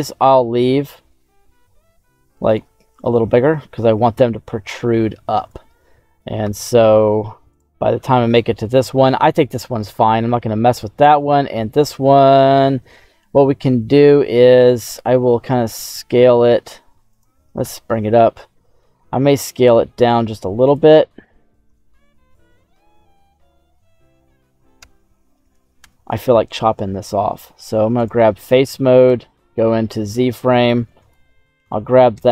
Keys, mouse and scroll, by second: 0.7 s, 2.4 click, 2.9 ctrl+a, 6.3 KP_Divide, 7.4 right click, 7.9 KP_Divide, 10.2 /, 11.1-13.2 right drag, 14.7 s, 15.0 z, 17.0 right click, 17.5 /, 18.9 s, 20.6 click, 21.8 middle click, 23.4 middle click, 24.7 KP_1, 25.7 Tab, 27.9 click, 29.0 z, 29.8-31.0 drag, 32.1 x.